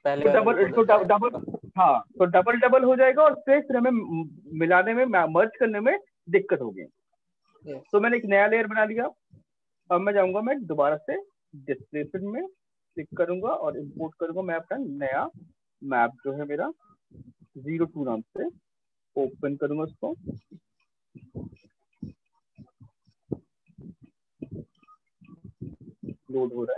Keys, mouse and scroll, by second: 9.8 click, 11.2 click, 12.2 click, 13.5 click, 15.6 click, 17.0 click, 18.3 click.